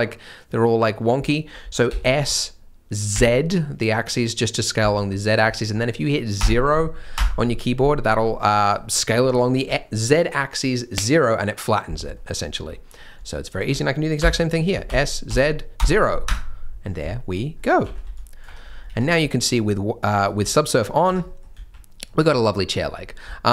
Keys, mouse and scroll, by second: 1.8 s, 8.1 scroll down 1, 8.3 middle click, 9.0 scroll down 1, 9.1 scroll up 1, 12.1 middle click, 12.9 scroll up 1, 13.5 alt+click, 14.8 s, 16.8 scroll down 1, 17.1 shift+middle click, 17.5 scroll up 1, 17.9 alt+a, 18.0 c, 18.6 scroll down 1, 18.9 Tab, 19.2-19.6 scroll up 1, 20.0 middle click, 20.3 Tab, 20.7 middle click, 21.0 Tab, 21.2 middle click, 21.5 z, 22.0 middle click, 22.3 scroll down 1, 22.5 middle click.